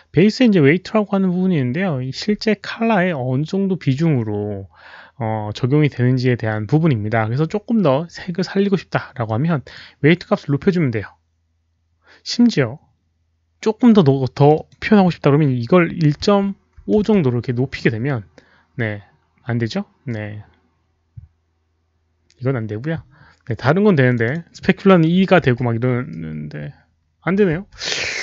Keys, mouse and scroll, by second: 9.2-9.7 drag, 14.3 click, 14.5 click, 16.1 click, 16.1 KP_Decimal, 16.1 KP_1, 16.7 KP_5, 16.9 Return, 21.7 Return, 21.7 KP_5, 21.7 KP_Decimal, 21.7 KP_1, 24.0 click, 24.1 Return, 24.1-25.1 typing, 24.2 click, 24.3 Return, 25.4 Return, 26.6 Return, 26.6 click, 26.6-27.2 typing, 27.2 Return, 27.2 click.